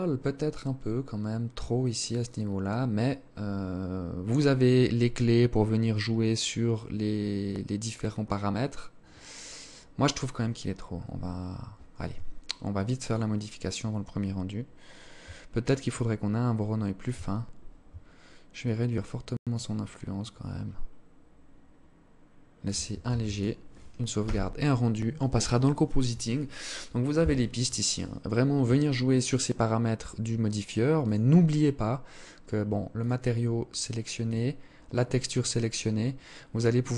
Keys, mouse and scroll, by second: 11.0 Escape, 12.1 click, 14.9 shift+click, 16.4-16.8 scroll up 3, 17.6 shift+click, 22.0 ctrl+s.